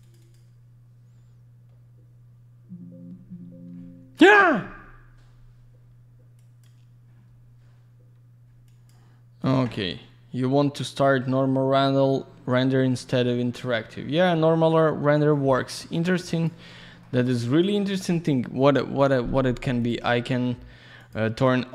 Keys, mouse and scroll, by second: 0.0 double click, 0.1 click, 0.2 click, 6.3 click, 8.6 click, 9.3 click, 9.4 click, 15.2 click, 16.2 click, 16.4 click, 16.7 alt+middle click, 17.8 click, 17.9 click, 19.7 click, 19.8 click, 20.9 click, 21.0 click.